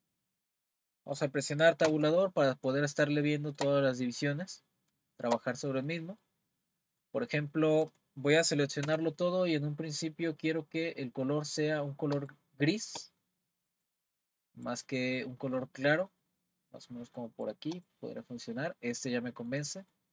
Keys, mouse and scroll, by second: 1.9 Tab, 3.3-7.3 shift+middle drag, 7.3-8.4 scroll down 1, 8.4-8.8 scroll down 2, 8.8 a, 11.0-12.1 scroll down 1, 12.1 click, 17.7 click, 18.6-19.2 scroll up 1, 19.2-20.1 middle drag.